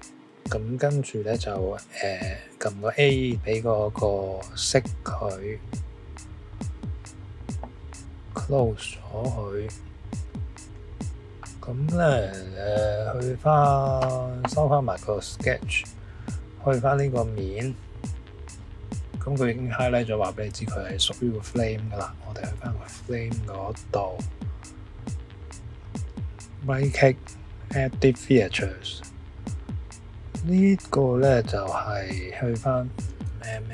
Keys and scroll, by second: 33.5 5.